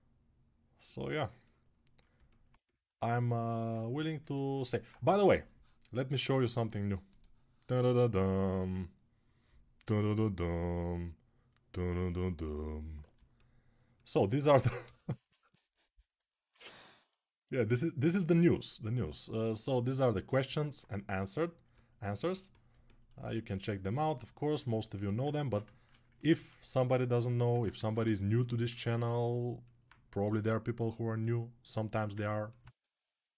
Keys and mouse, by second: 0.6-10.7 alt+right drag, 10.7-20.1 drag, 14.6 g, 22.5-24.7 alt+right drag, 26.1 ctrl+r, 27.3-30.0 ctrl+alt+right drag, 27.5 ctrl+z, 30.0 g, 32.4 1, 33.0-33.3 right drag.